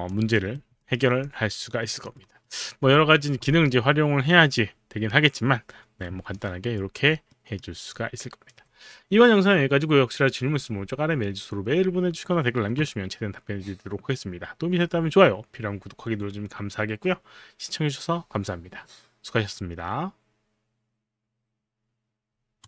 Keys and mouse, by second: 0.9 alt+middle click, 0.9 alt+right click, 2.2 alt+right click, 6.4 alt+click, 7.4 alt+middle click, 8.1 alt+click, 8.1 alt+middle click, 22.6 click.